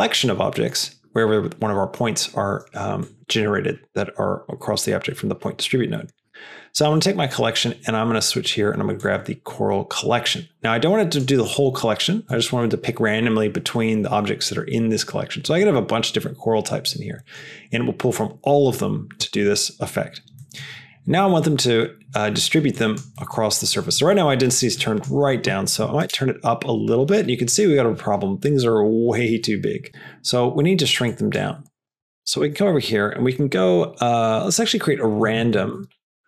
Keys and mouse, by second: 0.1 click, 3.0 click, 7.3-9.1 drag, 11.0 click, 17.2 click, 20.4 click, 22.6 click, 23.2 middle click, 24.8-26.9 drag, 31.0 click, 31.6 click, 31.9 click, 32.2 shift+a.